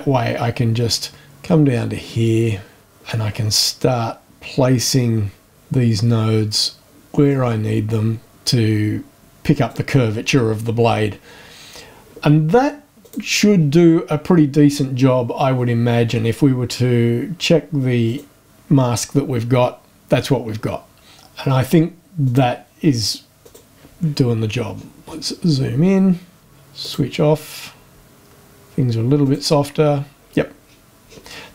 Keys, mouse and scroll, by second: 2.8-5.5 drag, 7.3-9.9 drag, 13.0 click, 13.5 scroll down 2, 18.0 click, 22.2 click, 23.4 click, 24.7-25.6 scroll up 2, 26.8 click, 29.2 click, 30.6-31.4 scroll down 4.